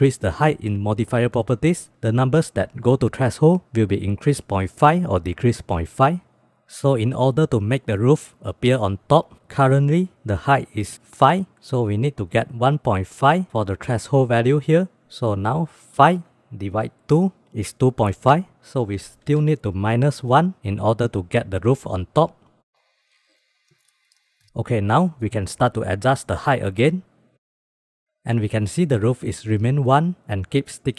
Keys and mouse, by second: 0.9 click, 1.8 click, 16.2-17.2 drag, 18.8 shift+d, 20.0-21.2 drag, 21.8 click, 23.6 click, 23.9 g, 24.4 click, 25.2 click, 25.8 click, 26.1 middle click, 26.8 click, 27.5 click, 27.7 click, 28.0 click.